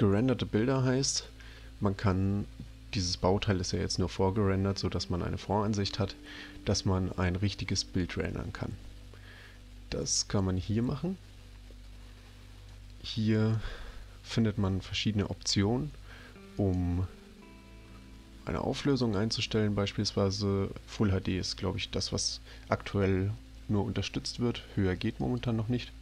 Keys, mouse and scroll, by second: 10.3 click, 12.7 click, 16.6 click, 18.9 click, 25.2 click.